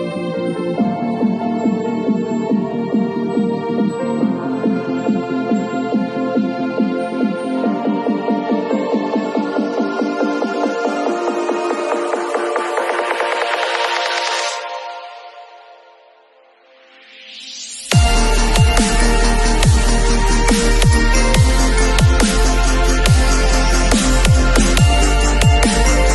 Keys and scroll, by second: 1.8 space, 3.5 ], 12.4 [, 20.1 space.